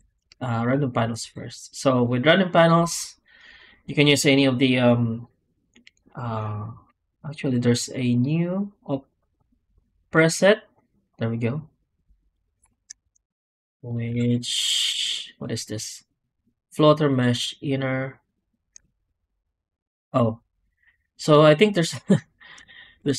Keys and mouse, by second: 12.2 drag, 12.6 ctrl+z, 12.9 Tab, 13.7 Tab, 14.0 shift+q.